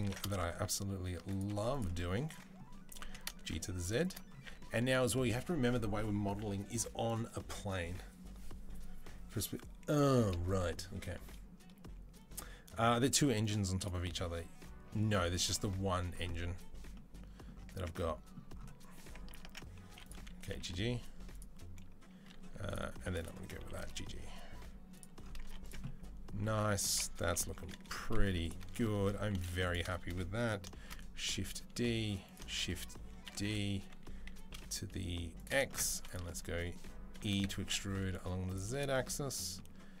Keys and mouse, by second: 1.5 click, 2.7 click, 2.7 g, 2.8 alt+middle click, 2.9 click, 3.1 shift+middle click, 3.9 click, 4.3-28.3 middle drag, 4.3 z, 19.0 Tab, 19.3 Tab, 19.7 1, 20.3 g, 22.5 click, 22.8 2, 23.0 click, 23.4 g, 25.3 Tab, 25.4 click, 26.4 Tab, 27.0 KP_Enter, 27.2 KP_3, 28.1 2, 28.3 click, 28.3-40.0 middle drag, 29.3 3, 30.6 shift+d, 32.3 shift+d, 35.8 2, 37.0 e.